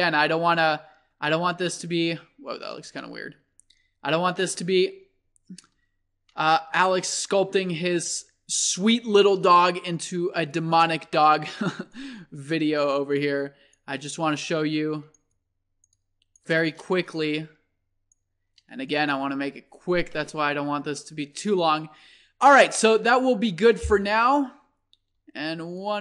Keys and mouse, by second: 1.3-1.7 drag, 1.7-2.6 middle drag, 2.9 ctrl+z, 4.6-7.3 drag, 7.3 middle click, 7.7 click, 10.9 click, 11.2 click, 11.3-14.4 middle drag, 19.6-20.7 middle drag, 21.1-21.9 middle drag, 24.3-25.5 middle drag, 25.5-26.0 drag.